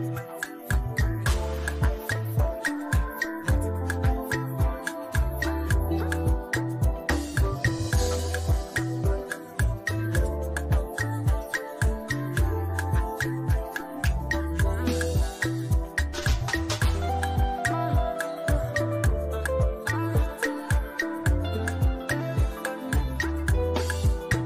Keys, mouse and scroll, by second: 0.2 ctrl+j, 2.1 click, 2.9 right click, 4.2 click, 6.2 ctrl+t, 8.4-16.1 alt+drag, 16.1-22.7 drag.